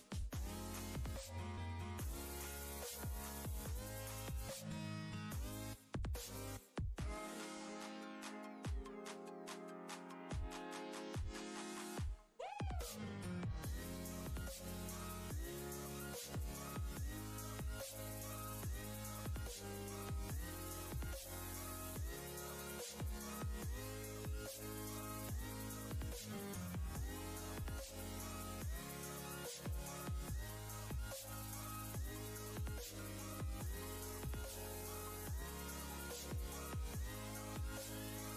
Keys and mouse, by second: 0.5 ctrl+space, 0.7 ctrl+click, 1.0-1.7 ctrl+space, 3.2-3.8 drag, 10.2-10.8 alt+drag, 12.9-13.6 ctrl+space, 13.4 ctrl+click, 13.5 ctrl+space, 14.1 space, 17.9 click, 20.4 click, 21.1 ctrl+space, 21.3-22.2 ctrl+click, 21.7 ctrl+space, 22.3 space, 22.3-22.9 click, 24.0 right click, 25.4-28.5 drag, 29.8 ctrl+g, 30.3 ctrl+space, 30.4-31.0 ctrl+click, 32.0-34.6 drag, 35.3 ctrl+space, 35.4-36.0 ctrl+click, 36.4 ctrl+space, 36.5-37.1 ctrl+click, 36.9 ctrl+space, 38.3 space.